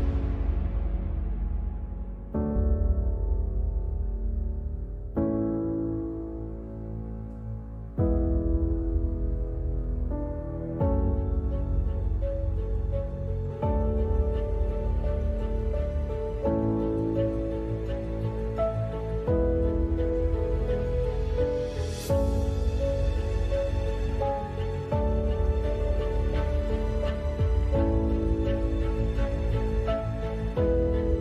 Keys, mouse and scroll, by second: 0.4 Tab, 0.4 click, 0.8 Tab, 1.3 g, 1.8 Tab, 2.2 Tab, 2.6 g, 3.0 g, 4.7 g, 5.1 g, 6.1 Tab, 7.4 ctrl+s, 8.6-9.5 right drag, 9.5-11.5 typing, 12.2 right click, 12.3 Tab, 12.8-14.4 drag, 13.0 right click, 13.2 z, 13.6 z, 14.0 g, 15.6 click, 16.2 click, 16.2 g, 16.7 g, 17.4 click, 17.6 g, 18.4 click, 18.6 g, 19.2-20.4 drag, 19.6 g, 20.8 click, 20.8 g, 21.6 a, 21.6 ctrl+s, 21.9 Tab, 22.4 Tab, 22.9 g, 23.2 click, 23.9 x, 24.4 g, 25.2 g, 26.4 f, 26.8 ctrl+z, 27.6 w, 28.2 g, 29.3 x, 30.3 g, 30.9 Tab.